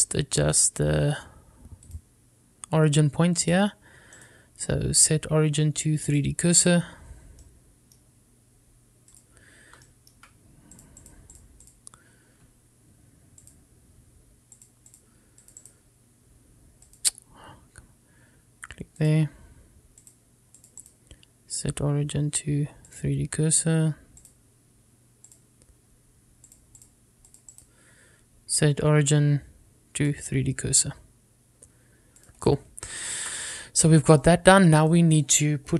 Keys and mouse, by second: 1.2-1.5 shift+middle drag, 3.1-4.1 drag, 4.6 click, 5.4-7.3 right drag, 8.6 middle click, 10.2 click, 11.0 shift+middle click, 12.0 click, 12.5-12.9 drag, 14.6 click, 15.7-16.2 drag, 16.6 click, 16.8-18.5 right drag, 20.2 click, 21.7 click, 22.0-24.1 right drag, 26.4 click, 27.9 click, 28.7-31.2 right drag, 34.2 shift+middle drag, 35.4 shift+middle click.